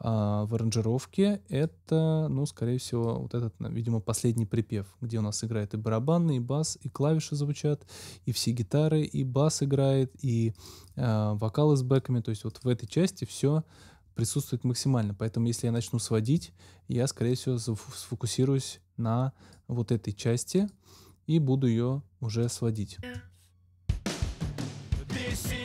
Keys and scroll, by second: 22.9 space.